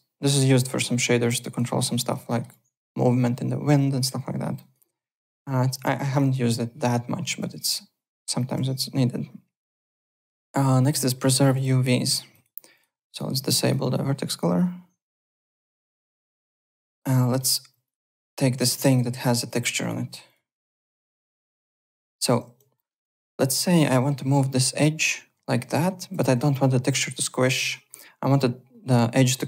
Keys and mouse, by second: 1.4 alt+right click, 1.6 alt+click, 2.2 alt+middle click, 2.5 alt+click, 4.4 alt+middle click, 4.6 alt+right click, 4.8 `, 5.9 alt+click, 7.4 alt+Tab, 8.4 alt+click, 10.8 click, 11.4 ~, 11.5 click, 12.0 click, 12.9 ~, 13.1 click, 15.2 click, 15.5 alt+right click, 15.9 alt+middle click, 16.1 alt+right click, 16.5 alt+middle click, 16.9-19.1 typing, 17.2 alt+middle click, 17.8 click, 18.6 click, 18.9 alt+middle click, 19.4 click, 20.2 click, 21.0-22.9 typing, 21.2 alt+click, 21.6 click, 21.6 click, 22.7 alt+middle click, 22.9 alt+right click, 23.1 alt+middle click, 23.6 click, 23.9 alt+middle click, 24.8 click, 26.1 ctrl+z.